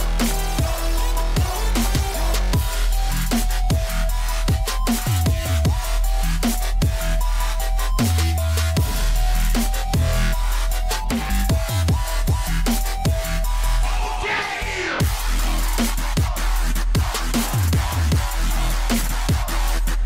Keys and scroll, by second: 0.0-0.2 typing, 4.6-5.9 typing, 8.6 z, 10.0 r, 13.8 Escape, 16.9 Escape, 18.3-19.8 typing, 18.5 Escape.